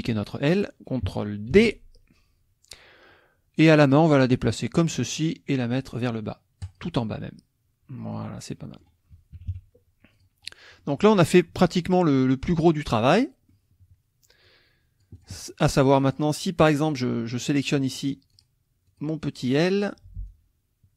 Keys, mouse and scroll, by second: 1.5 ctrl+d, 3.7-5.3 drag, 6.6 click, 8.1 click, 9.3 KP_Subtract, 10.1 click, 10.5 middle click, 11.9 click, 13.1 middle click, 14.4 click, 15.9 click, 16.9 click, 17.4 click, 17.8 middle click, 18.3 click, 18.9 click, 19.8 click, 20.3 click.